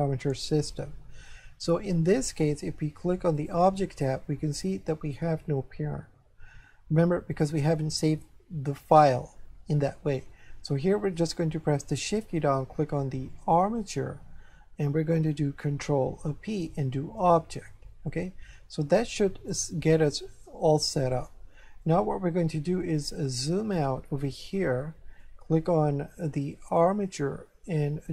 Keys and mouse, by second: 3.4 click, 13.4 shift+click, 16.1 ctrl+p, 17.2 click, 21.3 shift+middle click, 23.4 shift+middle click, 24.8 shift+middle click, 26.7 click.